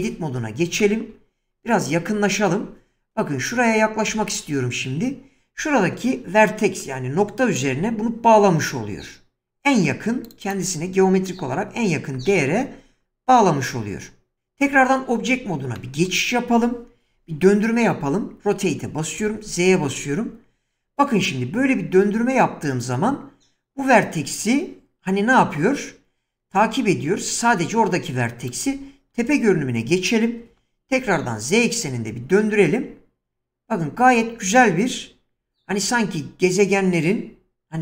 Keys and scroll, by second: 0.0 Tab, 4.1 <, 14.7 Tab, 17.1 r, 19.2 z, 29.1 7, 30.5 r, 31.1 z.